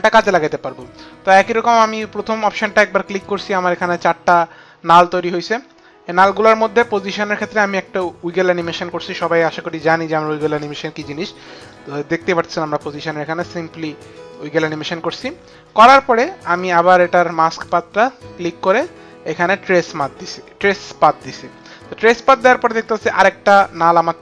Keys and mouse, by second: 3.9 click, 5.9 click, 9.8 click, 14.0 click, 18.2 click, 19.4 click, 22.8 click.